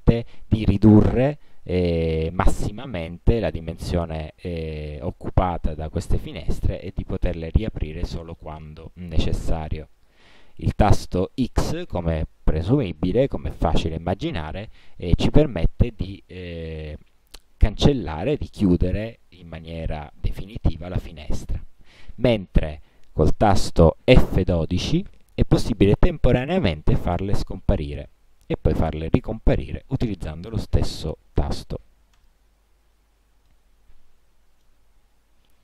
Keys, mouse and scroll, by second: 8.0 click, 9.1 click, 15.5 click, 25.2 F12, 28.3 F12, 32.3 click, 33.7-35.0 drag.